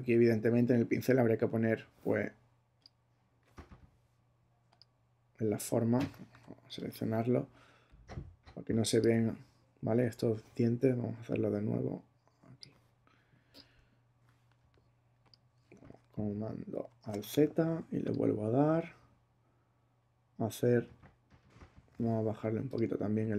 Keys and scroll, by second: 6.4 b, 15.9 alt+super+z.